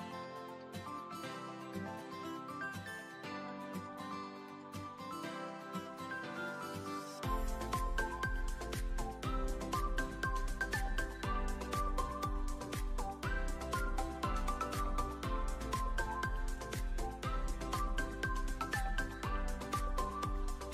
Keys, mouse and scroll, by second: 13.1 click, 13.6 ctrl+s, 14.1 KP_0, 16.3 ctrl+b.